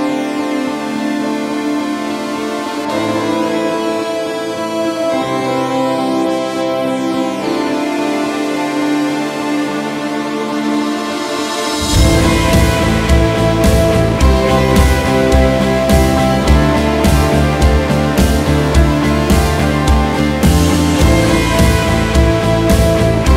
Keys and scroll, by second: 1.2 Delete, 2.4 alt+\, 3.8 Up, 5.4 alt+Up, 5.7 alt+\, 6.3 alt+Up, 11.1 ctrl+,, 14.1 ctrl+w, 17.1 ctrl+q, 20.7 KP_Enter.